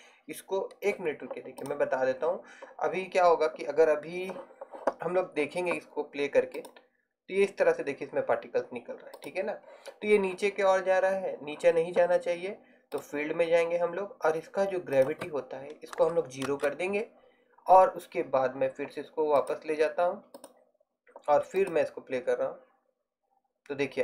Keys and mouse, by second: 0.8-3.3 middle drag, 6.6-8.5 drag, 9.4-16.7 drag.